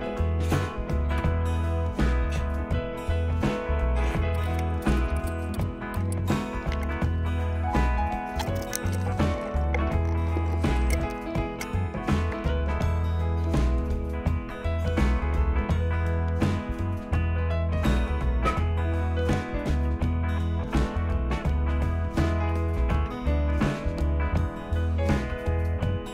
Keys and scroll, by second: 1.2 Return, 14.5 Return, 18.9 Down, 19.6 Down, 20.5 Up, 21.4 Down, 21.6 Down, 21.8-22.3 typing, 23.1 Return, 25.3 Return.